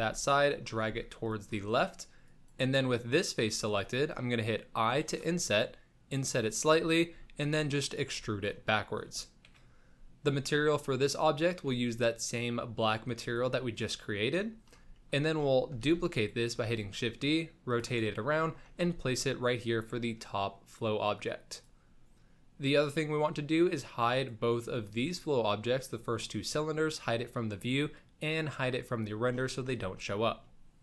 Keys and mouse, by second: 0.8 g, 2.2 click, 2.8-3.3 middle drag, 3.7 shift+middle click, 4.9 i, 6.6 middle drag, 7.1 e, 8.1 Tab, 8.7 middle drag, 9.5 KP_1, 11.7-13.4 drag, 15.0 shift+middle drag, 15.8 shift+d, 16.6 r, 18.1 shift+middle drag, 18.8 g, 24.2 click, 24.8 click, 30.5-30.8 middle drag.